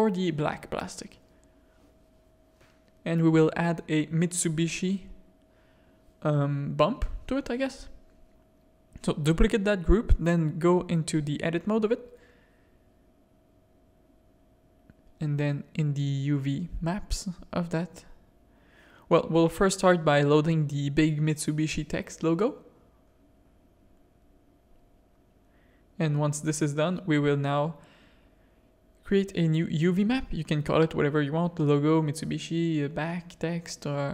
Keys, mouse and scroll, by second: 0.5 click, 1.4 drag, 2.0 shift+click, 2.5 click, 3.7 click, 4.1 click, 6.6 /, 8.3 click, 9.5 click, 9.8 Tab, 10.4 click, 10.9 click, 11.8 click, 14.5 shift+click, 16.5 shift+click, 18.3 click, 26.3 click, 29.1 click, 30.9-34.1 drag.